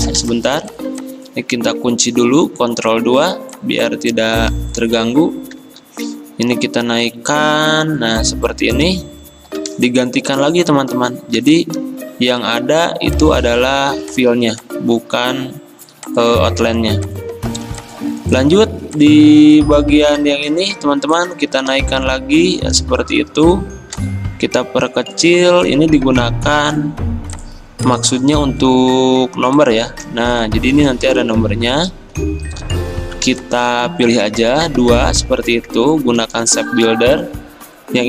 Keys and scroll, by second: 2.4 ctrl+2, 5.6 ctrl+z, 8.9 x, 11.4 v, 36.2 m.